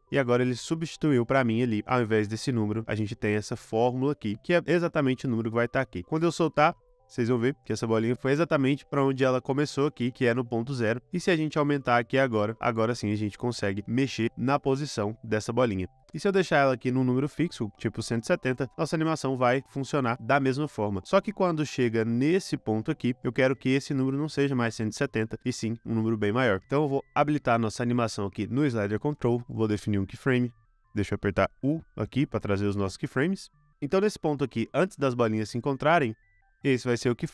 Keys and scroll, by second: 18.7 space, 21.1 space, 31.8 u.